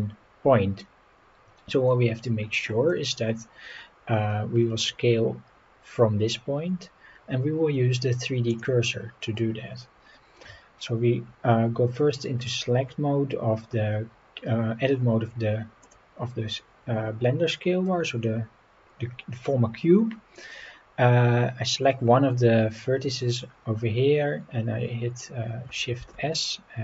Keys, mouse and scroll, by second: 3.3-4.5 scroll up 9, 4.6 scroll down 3, 5.5-6.0 scroll up 4, 8.5 click, 9.2-9.5 scroll up 4, 10.5 Tab, 15.8 click, 17.8-18.8 scroll down 5, 21.7 scroll up 2, 26.0 shift+s.